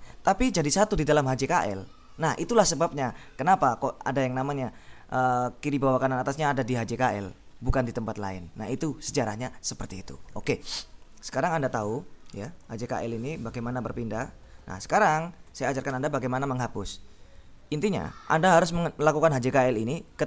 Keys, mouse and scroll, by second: 12.1-14.4 typing, 15.6 Escape.